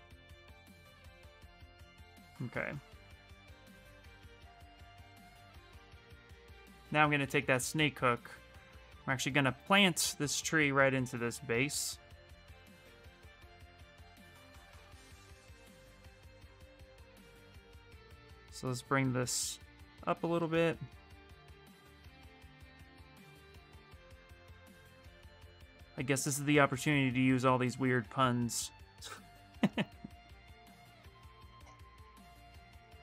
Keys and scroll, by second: 6.4-7.8 typing, 11.4 s, 19.7 s, 28.8 s.